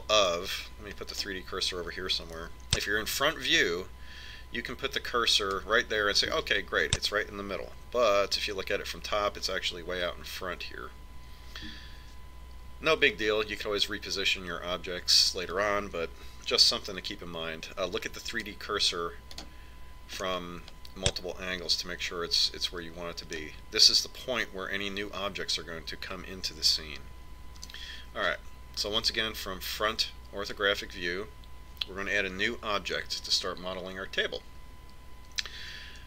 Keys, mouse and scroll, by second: 1.1-2.2 middle drag, 2.7 click, 3.9 KP_1, 6.8 click, 9.9 KP_7, 19.7 shift+s, 21.8-23.9 middle drag, 29.3 KP_1.